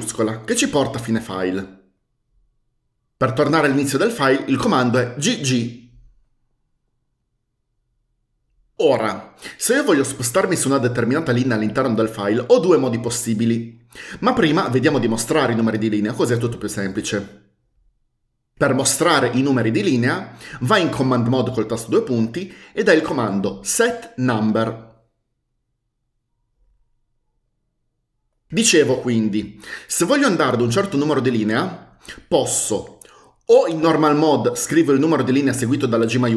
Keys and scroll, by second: 5.6 typing, 22.1 typing, 23.7-25.8 typing.